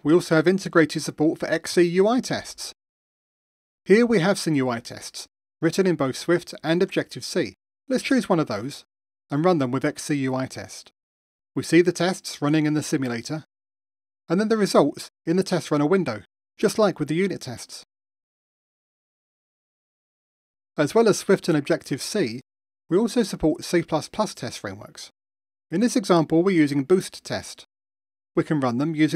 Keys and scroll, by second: 2.2 super+4, 7.1 alt+super+r, 10.4 ctrl+r, 16.6 super+4.